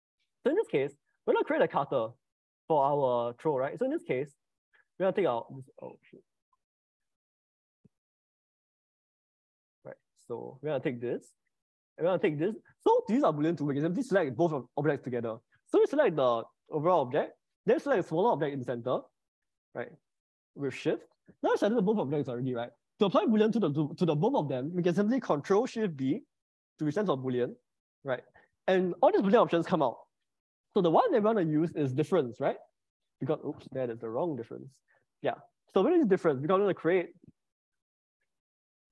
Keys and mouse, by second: 1.1-3.7 middle drag, 4.9 s, 6.0 Escape, 6.5 s, 7.0 y, 8.0 Escape, 8.3 s, 9.2 z, 11.7 click, 16.2 middle click, 20.3 shift+click, 25.9 ctrl+shift+b, 27.7 ctrl+shift+b, 34.3 ctrl+z, 34.5 ctrl+z, 36.4 click, 36.8 shift+click, 38.1 ctrl+shift+b.